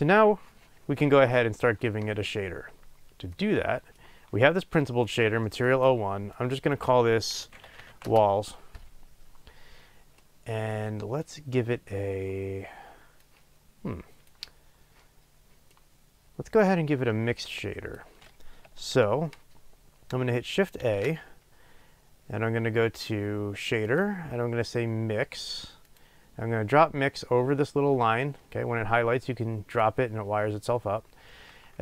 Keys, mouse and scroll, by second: 8.1 l, 8.2 Return, 17.5 click, 29.8 click.